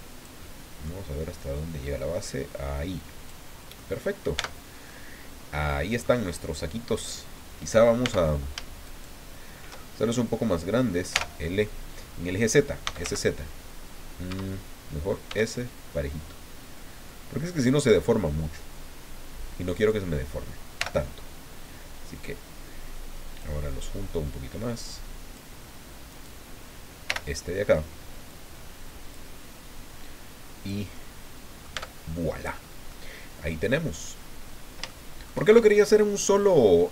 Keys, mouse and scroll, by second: 0.4 middle click, 1.4-3.5 drag, 3.8 middle click, 4.4 Tab, 4.9 middle click, 5.0-6.2 drag, 8.0 Tab, 8.8 shift+right click, 11.1 l, 12.6-13.5 typing, 14.3 Escape, 15.3 s, 17.5 click, 19.7 right click, 20.8 l, 22.2-23.6 drag, 24.3-25.5 drag, 26.1 right click, 27.0 l, 28.3-29.3 drag, 30.0 click, 30.9 middle click, 31.7 Tab, 32.4-32.7 scroll down 2, 32.9-33.9 middle drag, 34.1 scroll down 2, 34.9 shift+click.